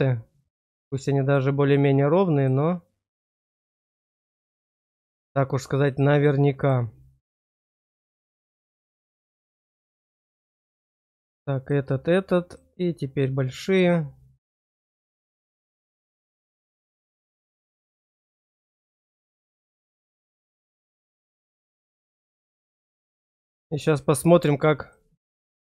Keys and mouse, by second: 0.4 click, 2.5 click, 4.3 click, 4.8 click, 5.8 click, 6.5 click, 7.7 click, 8.4 click, 9.7 click, 11.5 click, 12.4 click, 15.1 click, 16.2 click, 16.9 click, 18.2 click, 21.0 click, 21.6 click, 23.8 click.